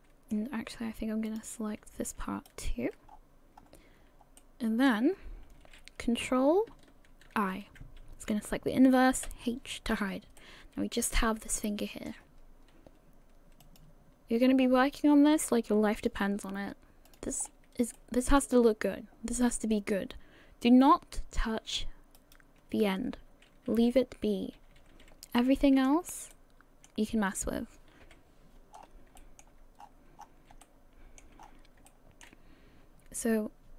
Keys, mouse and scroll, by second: 0.1 shift+middle click, 1.3 click, 2.5 alt+shift+right click, 3.1-3.6 scroll down 4, 3.6-4.3 scroll up 2, 4.4 middle click, 7.4 ctrl+i, 9.2 h, 10.4 middle click, 13.6 click, 16.0 click, 17.1 click, 17.5 scroll up 2, 18.0 shift+middle click, 19.8-20.2 scroll up 1, 20.4 scroll down 1, 22.2 alt+right click, 24.6 a, 24.8 a, 25.4 middle click, 26.3 shift+middle click, 27.2-28.0 scroll down 1, 28.1 KP_1, 28.8 scroll down 7, 29.2 shift+middle click, 29.8-30.2 scroll up 7, 30.5 scroll up 5, 30.6 shift+middle click, 31.4-31.8 scroll up 2, 31.9 shift+middle click.